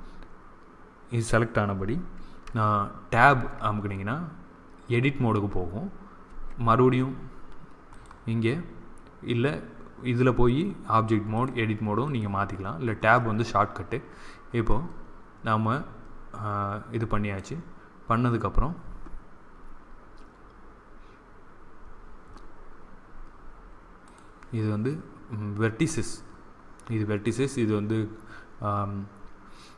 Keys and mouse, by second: 3.2 Tab, 6.2 Tab, 11.2 click, 11.9-13.0 drag, 14.6-16.5 middle drag, 23.9-25.7 drag.